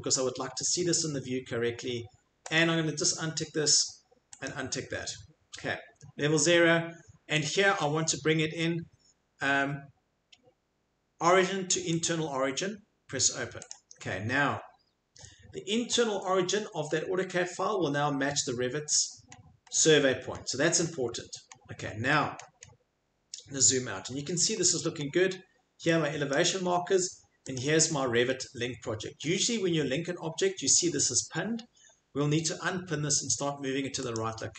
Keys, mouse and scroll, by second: 2.6 click, 4.4 click, 7.4 click, 12.0 click, 13.7 click, 18.7-20.3 scroll, 20.8 scroll, 21.5-24.8 scroll, 24.8 middle click, 24.8-25.9 scroll, 25.9 scroll, 26.3 click, 26.7 scroll, 26.8-29.2 middle click, 27.6 click, 27.8 scroll, 29.9 middle click, 34.1 click.